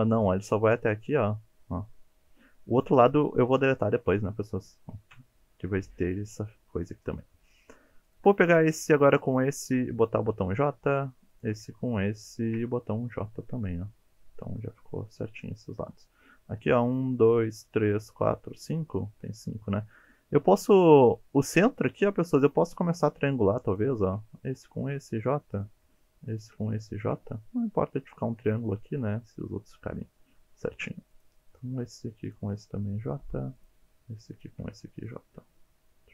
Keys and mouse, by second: 1.2-3.0 middle drag, 4.1 KP_3, 5.1 KP_1, 8.1 click, 10.2 j, 11.3 click, 12.2 shift+click, 13.1 j, 22.9 click, 23.7 shift+click, 24.6 j, 25.6 click, 27.2 j, 30.0 shift+middle click, 33.1 j, 34.4 shift+click, 35.2 j.